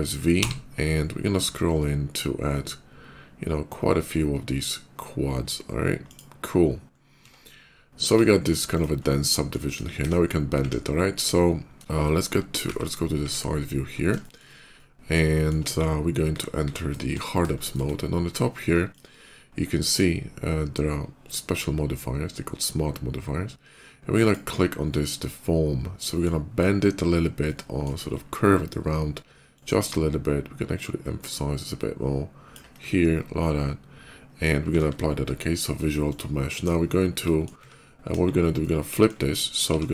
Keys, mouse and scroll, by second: 0.2 v, 0.8 middle click, 0.9 middle click, 1.5 middle click, 2.0 middle click, 2.3 middle click, 2.7 v, 3.3-3.7 scroll up 4, 5.3 scroll down 2, 5.9 click, 6.5 middle click, 6.8 middle click, 7.1 Tab, 8.5 click, 8.9 middle click, 9.0 middle click, 9.4 KP_5, 9.9 KP_5, 11.0 KP_5, 11.7 shift+middle click, 11.9 middle click, 13.6 middle click, 14.0 shift+middle click, 14.6 shift+middle click, 15.1 shift+middle click, 15.4 KP_5, 16.1 alt+w, 16.5 alt+w, 16.9 alt+w, 17.1 alt+w, 17.4 shift+middle click, 18.7 click, 23.9 click, 24.6-26.1 middle drag, 27.3 middle click, 29.4-32.4 ctrl+drag, 32.7-34.3 ctrl+middle drag, 34.6 ctrl+a, 35.9 click, 37.1 middle click, 38.0 KP_5, 38.4 middle click, 39.5 r.